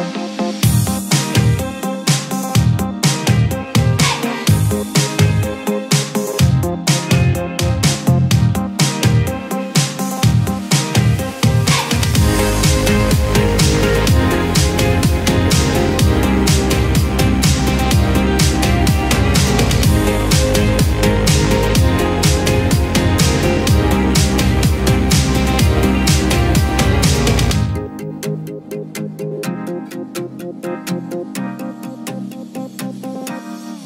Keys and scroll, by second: 4.8 ctrl+g, 6.8 ctrl+z, 31.5 ctrl+z.